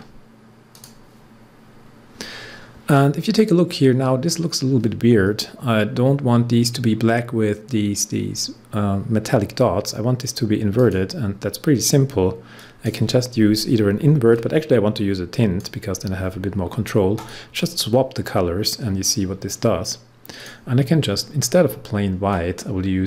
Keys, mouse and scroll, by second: 3.0 scroll up 1, 10.7-17.1 drag, 20.3-23.0 drag.